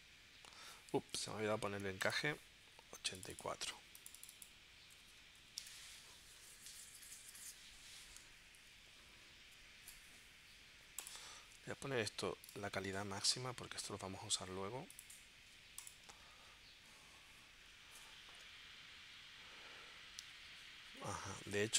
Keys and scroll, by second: 1.0 super+z, 5.0 8, 5.7 Return, 8.4 Left, 16.3 super+s.